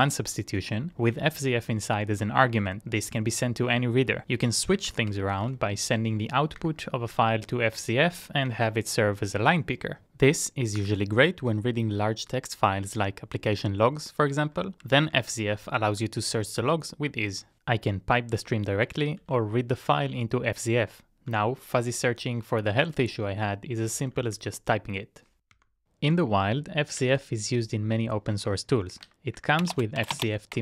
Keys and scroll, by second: 4.2-6.1 typing, 6.8 Return, 7.4 Up, 7.6 Up, 7.7 Up, 8.5 Up, 8.6 Up, 26.7-30.0 typing.